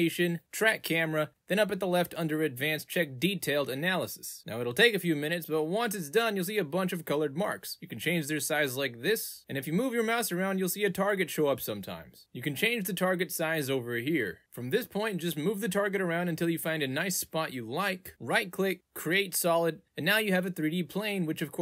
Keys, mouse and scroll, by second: 0.7 click, 1.8 click, 3.1 click, 7.0-8.7 drag, 11.4 ctrl+z, 13.4 click, 18.0 right click, 18.6 click, 20.0 click, 20.4 click, 20.7 click, 20.9 click, 21.3 click.